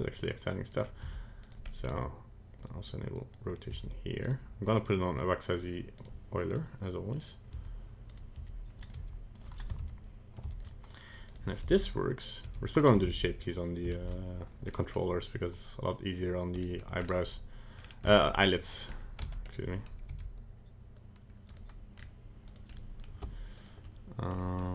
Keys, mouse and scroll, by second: 0.7 right click, 1.0 r, 1.6 middle click, 1.8 middle click, 2.8 click, 3.7 r, 4.7 click, 6.0 right click, 6.5 click, 7.5 r, 8.3 r, 8.9 g, 10.0 ctrl+z, 10.6 ctrl+z, 11.2 right click, 11.6 r, 12.4 g, 13.2 ctrl+z, 14.0 ctrl+z, 14.7 middle click, 16.6 middle click, 17.0-17.3 scroll up 2, 17.3 middle click, 17.8 scroll down 2, 18.1 shift+middle click, 18.3 middle click, 18.9 scroll up 1, 19.2 Tab, 19.4 middle click, 20.1 g, 21.9-22.4 scroll up 2, 22.4 right click, 22.7 middle click, 23.0 middle click, 23.5 shift+right click, 24.4 middle click, 24.6 middle click.